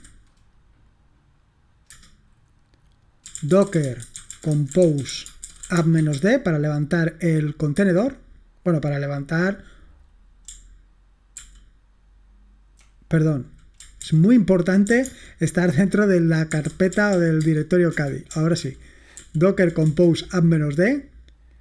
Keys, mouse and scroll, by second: 0.0-0.4 typing, 2.0 Return, 3.1-6.7 typing, 7.8 Return, 11.4 ctrl+p, 14.1 ctrl+c, 14.7-15.4 typing, 16.4-17.6 typing, 17.9 Return, 18.7 ctrl+p, 19.3 ctrl+p, 19.9 Return.